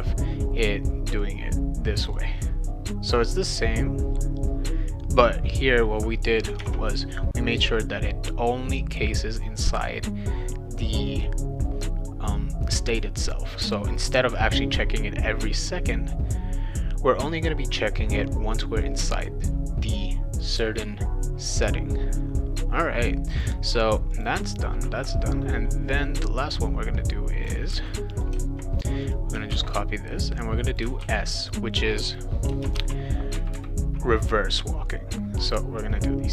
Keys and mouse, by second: 1.2 click, 6.6 alt+Tab, 23.3 click, 24.1 click, 26.5 click, 27.7 ctrl+c, 28.1 click, 29.0 click, 29.5 ctrl+v, 30.2 click, 31.0 shift+w, 32.5 BackSpace, 32.7 shift+s, 35.8 click.